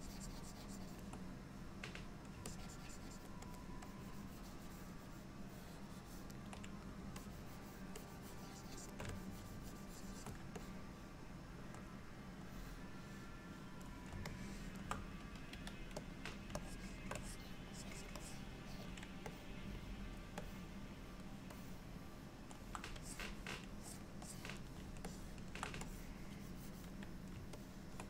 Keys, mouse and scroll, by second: 2.5 ctrl+click, 3.6 ctrl+click, 3.9 ctrl+click, 7.2 shift+click, 8.0 shift+click, 9.2 ctrl+click, 10.7 middle click, 14.4 shift+middle click, 16.5 f, 16.7 shift+click, 17.3 click, 17.8 click, 18.3 click, 19.4 middle click, 20.5 middle click, 21.6 middle click, 23.1 click, 23.9 click, 24.3 click, 25.1 ctrl+middle click, 25.9 click, 26.5 click, 27.6 ctrl+middle click.